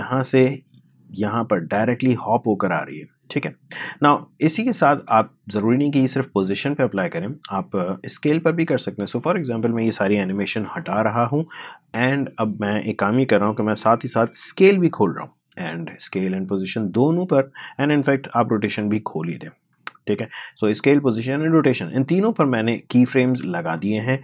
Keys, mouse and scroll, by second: 0.0-3.4 drag, 8.3-10.5 drag, 10.5 Delete, 11.2-14.1 drag, 14.1 shift+s, 14.8 click, 18.6 shift+r, 19.0 shift+r, 19.6 click, 23.7-24.2 drag.